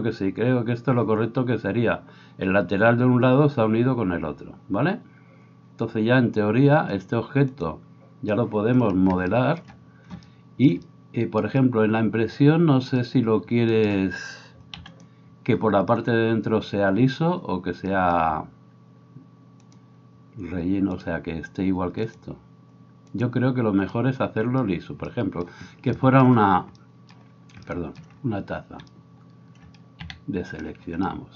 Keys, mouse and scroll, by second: 13.9-31.3 drag, 14.7 x, 26.0 shift+middle click, 30.3 a.